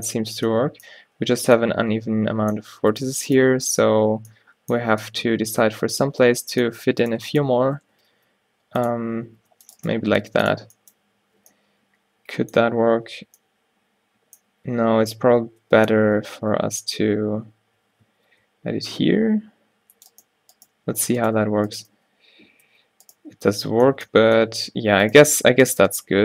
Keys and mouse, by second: 3.7 f, 4.4 right click, 4.9 a, 7.2 click, 8.0 g, 8.2-9.2 drag, 9.4 ctrl+r, 10.1 g, 11.3 ctrl+z, 14.8 ctrl+t, 15.0 ctrl+t, 15.9 ctrl+z, 16.2 ctrl+z, 16.7 ctrl+z, 18.2 ctrl+r, 20.7 click, 22.0-26.2 typing.